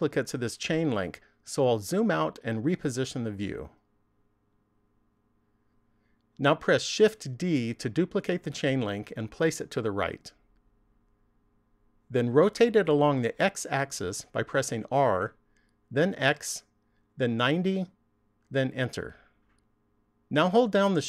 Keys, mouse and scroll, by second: 1.7-3.5 scroll down 1, 3.5 shift+middle click, 7.2 shift+d, 11.5 click, 14.4 r.